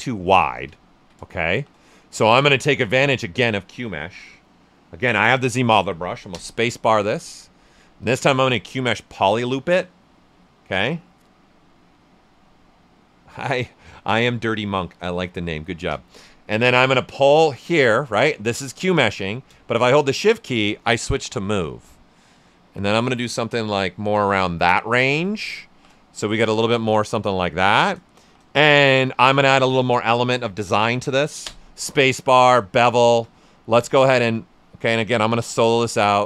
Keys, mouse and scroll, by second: 0.6 right click, 1.5 shift+f, 1.8 right click, 2.3 ctrl+right click, 6.3 space, 17.2-25.7 drag, 25.7 typing, 25.9 right click, 28.2 shift+f, 28.6 alt+right click, 31.4 ctrl+space, 32.5 ctrl+space, 32.5 click, 35.8 ctrl+alt+right click.